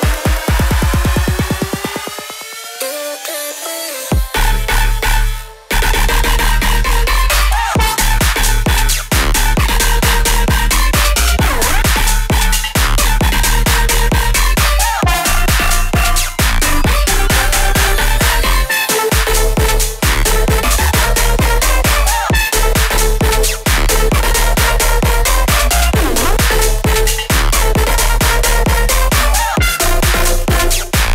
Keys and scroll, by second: 22.6 ctrl+t.